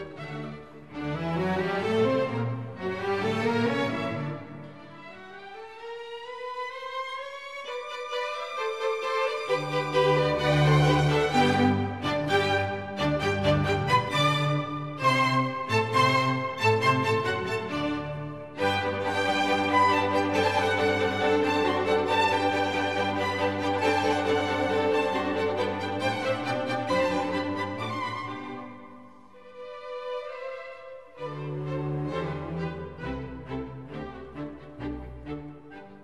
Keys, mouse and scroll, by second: 9.0 click, 11.4 Up, 11.5 Up, 11.9 Up, 12.1 Up, 12.3 Up, 12.8 Up, 12.8 Up, 13.0 Up, 13.3 Up, 13.5 Up, 13.7 Up, 13.9 Up, 14.1 Up, 14.3 Up, 14.5 Up, 14.7 Up, 14.9 Up, 15.1 Up, 15.3 Up, 15.6 Up, 18.7 ctrl+j, 23.6 Up, 28.6 Delete, 30.3 ctrl+d, 31.6 double click.